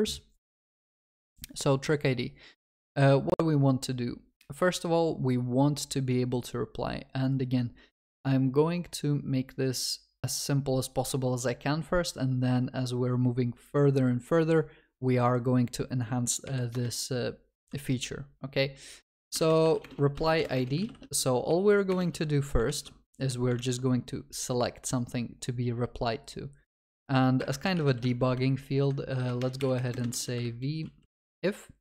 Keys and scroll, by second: 22.7 ctrl+s, 28.1 Tab.